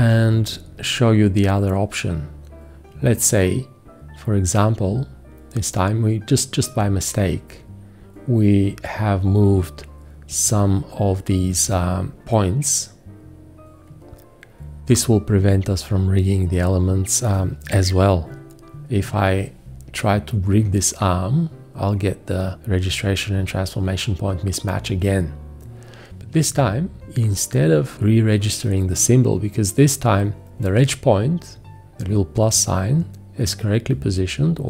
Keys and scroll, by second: 0.0 q, 19.0 F4, 26.4 v.